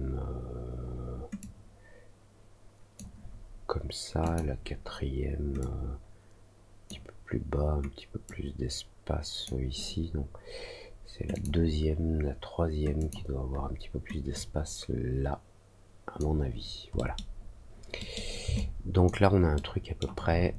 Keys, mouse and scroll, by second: 1.3-2.9 drag, 4.2 click, 5.5-6.8 drag, 8.2-9.4 drag, 11.3 click, 12.9 click, 14.3-16.1 drag, 16.9 middle click, 17.9 middle click, 18.5 alt+click, 19.5 alt+middle click.